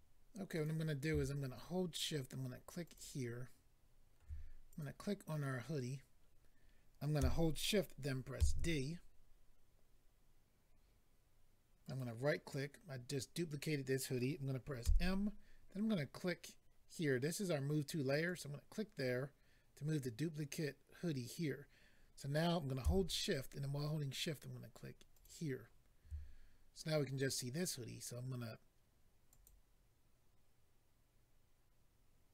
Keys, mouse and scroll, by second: 0.5 click, 2.8 shift+click, 4.6 click, 9.7 d, 11.8 right click, 12.0 right click, 16.2 m, 18.2 click, 18.4 click, 25.1 shift+click, 29.3 click.